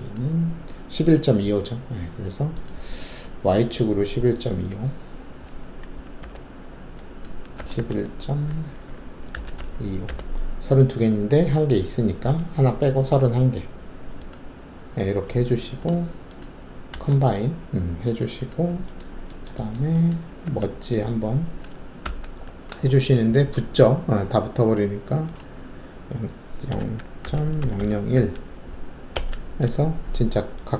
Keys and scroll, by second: 6.2 0, 7.5 typing, 9.0-10.0 typing, 16.9 alt+shift+a, 20.4 alt+1, 22.0 ctrl+q, 26.7-28.1 typing, 29.1 Return.